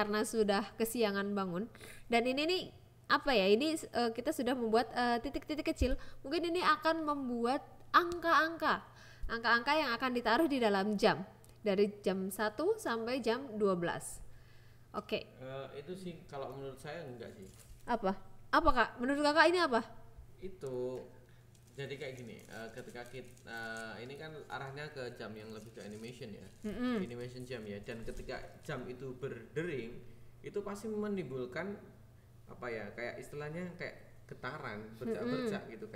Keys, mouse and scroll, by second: 19.9 click, 20.8 click, 21.3 g, 21.9 click, 22.9 click, 23.9 g, 24.4 click, 29.7 click, 30.7 shift+a, 32.0 click, 32.8 KP_7, 33.4 g, 34.2 click, 34.7 click, 35.5 g.